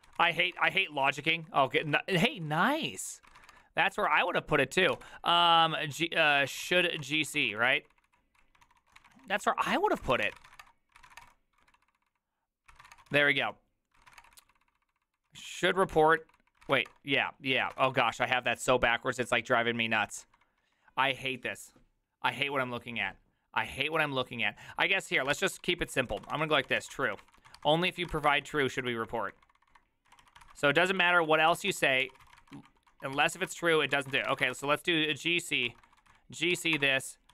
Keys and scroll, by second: 0.0-20.5 typing, 9.7 ctrl+c, 17.9 Return, 25.5-37.3 typing, 34.6 Return, 34.6 ctrl+d, 34.7 ctrl+d.